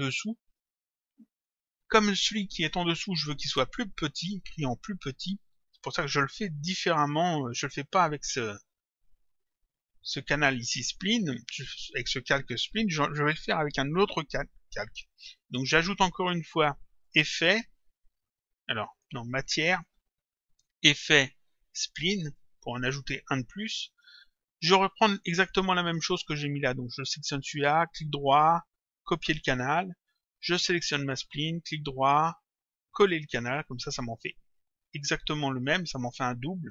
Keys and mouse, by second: 1.5 click, 8.2 click, 17.1 click, 18.9 click, 22.2 click, 25.3 click, 27.8 right click, 29.2 click, 30.8 click, 31.6 right click, 33.4 click, 35.8 click.